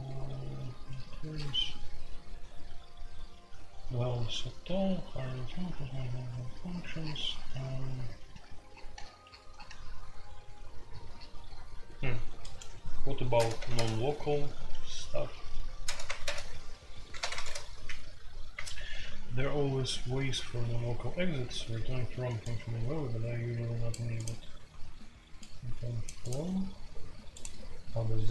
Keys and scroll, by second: 13.3-13.7 typing, 15.8-16.2 typing, 17.3-17.7 typing, 21.7 Escape.